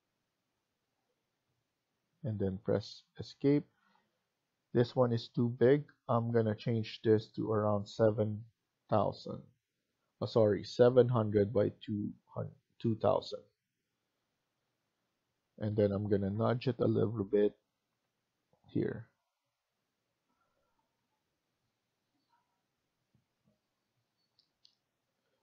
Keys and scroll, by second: 3.3 Escape, 3.6 Escape, 14.5 Escape, 16.8 Down, 17.3 Down, 17.8 Down, 18.7 Down, 21.6 Escape.